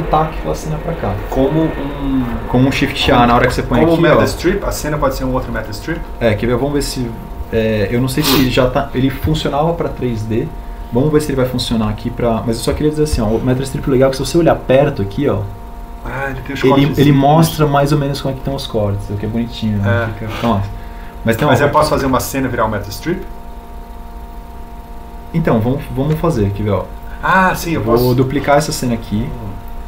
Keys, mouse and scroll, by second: 22.1 alt+g.